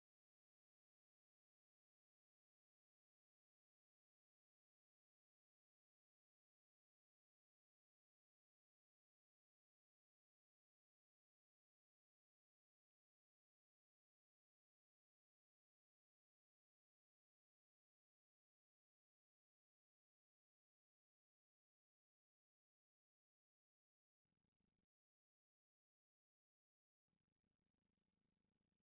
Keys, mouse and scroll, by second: 0.8 z, 1.4 c, 2.5 a, 2.8 a, 3.0 c, 3.4 right click, 5.0 1, 6.5 shift+middle click, 7.1 z, 7.4-8.4 middle drag, 11.6 middle click, 14.4 middle click, 15.1 middle click, 17.6-19.0 middle drag, 20.9 v, 21.4 right click, 21.6 v, 22.6-24.5 typing, 23.7 right click, 25.5 ctrl+x, 26.5-27.5 middle drag.